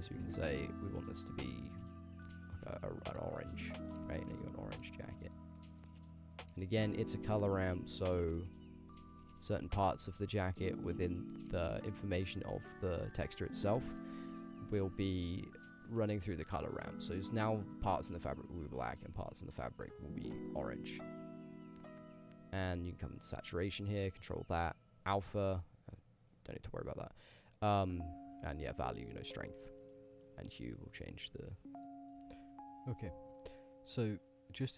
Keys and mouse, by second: 4.2 middle drag, 4.5 shift+middle drag, 4.9-5.3 ctrl+middle drag, 5.5 middle drag, 6.5 ctrl+middle click, 6.8 middle drag, 8.5-9.8 drag, 11.8 click, 12.3 click, 12.4 g, 13.3 middle click, 13.7 click, 14.3 click, 15.0 click, 15.7-18.4 drag, 19.0-21.5 drag, 22.2 click.